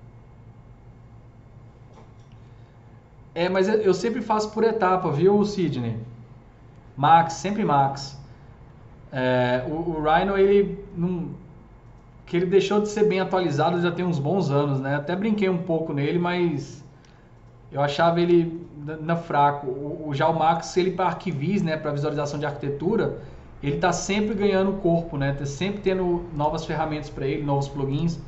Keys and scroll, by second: 17.0 ctrl+shift+e.